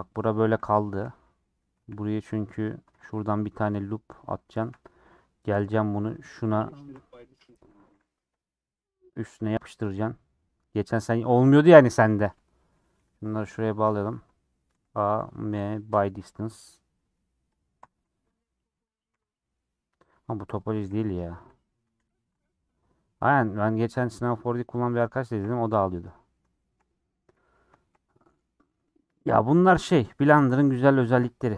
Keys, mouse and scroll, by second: 0.6 g, 1.1 middle click, 1.7 1, 2.8 ctrl+r, 4.5 1, 4.8 click, 5.0 middle click, 5.2-5.7 scroll up 1, 6.2 shift+click, 7.8 g, 8.8 click, 9.1 g, 10.0 g, 11.1 g, 12.2 click, 12.9 j, 13.3 click, 14.0 j, 14.8 a, 16.0 m, 17.6 click, 17.8 g, 18.9 click, 19.1 g, 20.7 click, 20.9 g, 21.7 a, 22.2 m, 22.4 scroll down 3, 22.6 middle click, 23.3 scroll up 3, 23.6-25.6 middle drag, 25.6 scroll down 3, 25.7-26.9 middle drag, 26.9 scroll down 2, 27.1 middle click, 28.0-28.7 scroll up 5, 28.3 middle click, 28.7 middle click, 29.5-29.9 scroll down 4, 29.9 middle click, 30.5 scroll up 4, 30.8-31.4 scroll down 3, 31.0 middle click, 31.4-31.5 shift+middle drag.